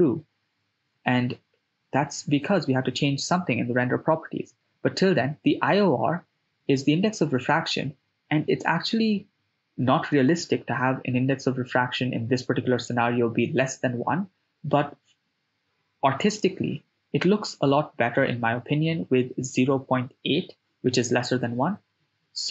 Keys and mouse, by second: 1.5-4.5 drag, 10.8 shift+space, 13.0 shift+space, 16.6 click, 20.2 click, 21.1 click, 22.1 click.